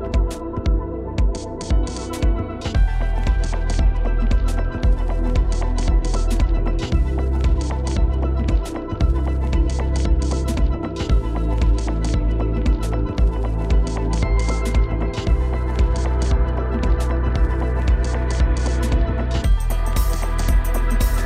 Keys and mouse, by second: 0.0 shift+click, 0.3 middle click, 0.8 shift+click, 1.4 shift+click, 2.4 shift+click, 2.7-3.2 shift+drag, 3.5-3.9 shift+drag, 4.3 shift+click, 6.3 middle click, 6.7 middle click, 7.0 middle click, 7.6 middle click, 7.9 Tab, 8.7 click, 9.3 shift+click, 11.0-12.3 drag, 13.2 click, 13.7 click, 14.2 click, 15.0 click, 15.5 click, 16.4 Tab, 17.2 click, 18.0 middle click, 19.3 middle click, 19.9 shift+click, 20.9 middle click.